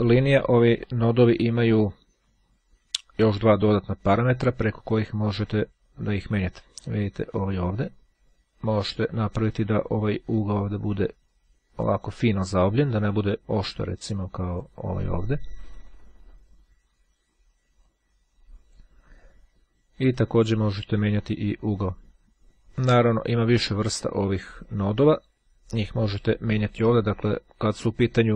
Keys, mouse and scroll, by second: 0.2-1.4 drag, 5.4-6.6 drag, 7.1-9.8 drag, 10.6-12.5 drag, 13.6-15.2 drag, 16.0-17.0 scroll down 1, 18.0-19.2 drag, 19.2-19.8 scroll up 1, 20.4-22.3 drag, 23.0-24.5 drag.